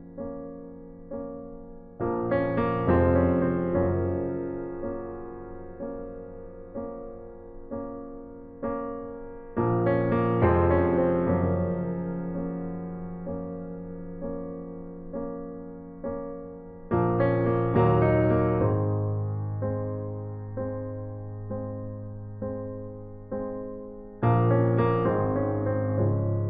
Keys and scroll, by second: 3.1 ctrl+alt+t, 7.2 Return, 7.5 ctrl+alt+z, 23.2-24.1 typing, 24.1 Return.